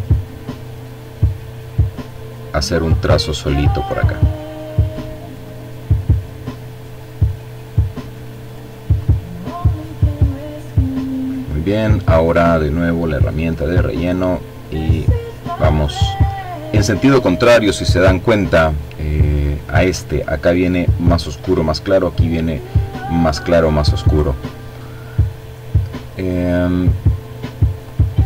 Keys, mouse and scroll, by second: 2.0 click, 2.7-3.9 drag, 4.4 click, 5.5 click, 6.0 click, 7.0 click, 8.0 click, 8.8 click, 9.4 click, 11.7 click, 12.6-15.1 drag, 26.3 click.